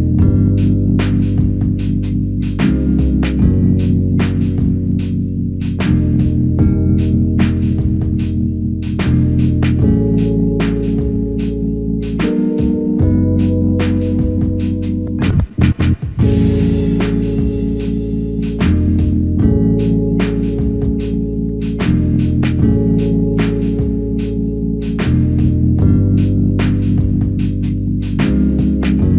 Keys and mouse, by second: 3.1 double click, 5.1 shift+click, 10.0 double click, 16.1 shift+click, 24.8 shift+click, 28.9 alt+click.